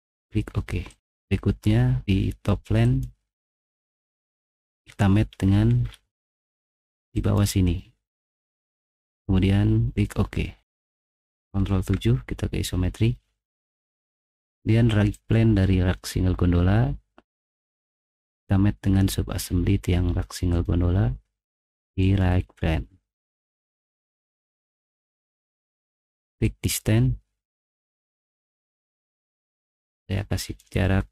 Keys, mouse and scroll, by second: 0.9 click, 2.8 click, 4.9 middle click, 5.2 middle click, 5.5-6.1 scroll down 2, 6.1 middle click, 7.5 click, 8.4 click, 11.8 ctrl+7, 15.1 click, 15.7 scroll down 1, 22.0 click, 28.8 click, 29.5 click, 30.2 click, 30.9-31.1 typing.